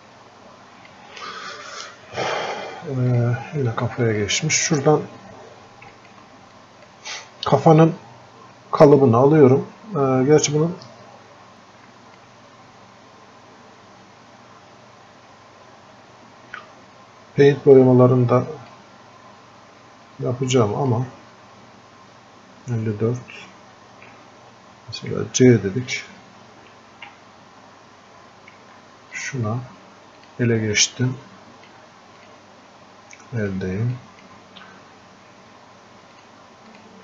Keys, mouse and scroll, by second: 0.3-37.0 drag.